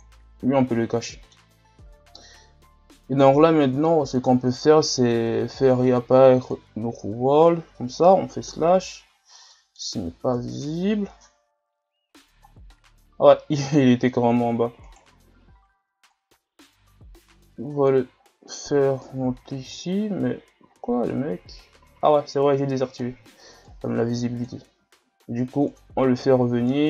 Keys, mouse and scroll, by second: 1.1-4.0 middle drag, 4.0-8.5 drag, 8.5 KP_Divide, 9.5 middle click, 10.3 KP_Divide, 12.1-12.5 scroll down 6, 13.6 KP_1, 14.3-14.9 scroll up 2, 14.9-16.1 right drag, 16.1-18.1 drag, 18.1 scroll up 3, 19.7-20.7 shift+scroll up 2, 20.7 z, 21.4 scroll up 3, 21.9 z, 22.3-22.7 scroll down 2, 22.7 scroll up 2, 23.6-24.8 drag, 24.8 s, 26.7-26.8 drag.